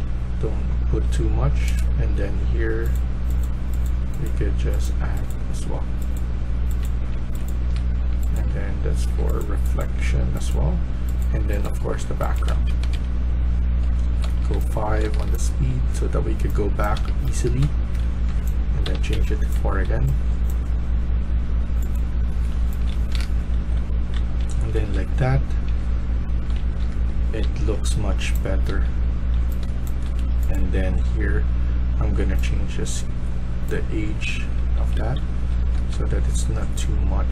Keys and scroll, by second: 5.5-9.0 typing, 11.0-15.4 typing, 12.6 Escape, 12.8 Escape, 17.3-19.7 typing, 21.9-29.6 typing, 33.7-35.8 typing.